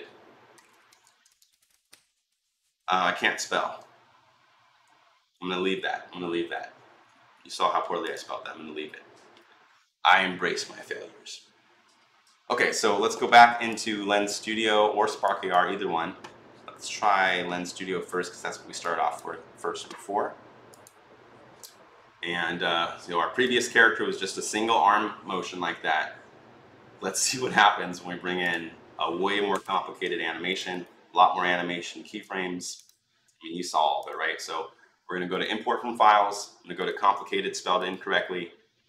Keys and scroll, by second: 0.0-2.2 typing, 29.4 ctrl+i.